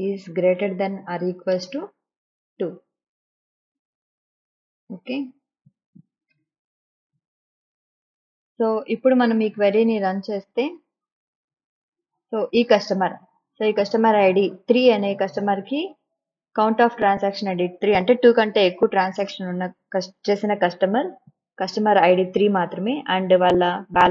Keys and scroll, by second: 0.0 space, 1.4 =, 1.8 space, 2.8 2.